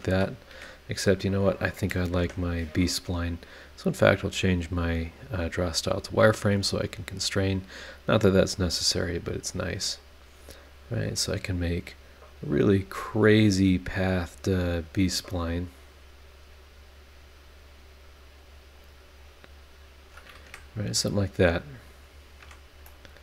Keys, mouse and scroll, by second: 0.5 Escape, 1.5 click, 2.2 Delete, 3.6 click, 4.3 click, 4.8 click, 5.4 click, 7.6 click, 9.2 click, 9.5 click, 10.0 click, 10.4 click, 10.9-11.5 scroll down 4, 11.9 click, 12.3 click, 12.7 click, 13.2 click, 13.7 click, 14.2 click, 15.0 click, 15.4 click, 15.8 click, 16.3-17.3 scroll down 5, 17.5 scroll up 2, 18.4 click, 18.8 click, 19.2 click, 19.6 click, 20.0 click, 20.4 Escape, 20.9-21.9 scroll up 5, 22.4 Escape, 22.8-23.2 drag.